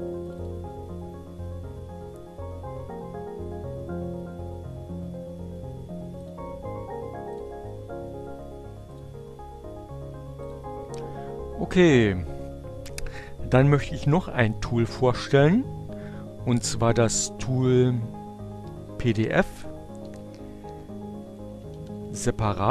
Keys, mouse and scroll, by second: 0.5 click, 2.0 click, 8.0 click, 8.7 click, 10.8 click, 12.4 click, 18.5 p, 18.8 f, 20.8-22.7 typing.